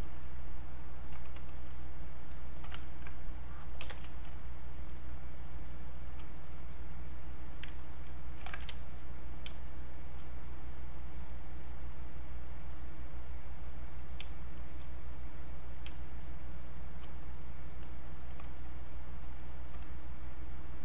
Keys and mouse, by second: 2.8 ctrl+right click, 3.5-4.3 typing, 6.5 click, 8.4 ctrl+z, 9.9 click, 10.0 space, 10.8 click, 14.2 space, 14.6 click, 14.7 space, 15.0 click, 15.9 space, 16.2 click, 16.4 space, 17.2 click, 18.5-20.8 shift+drag.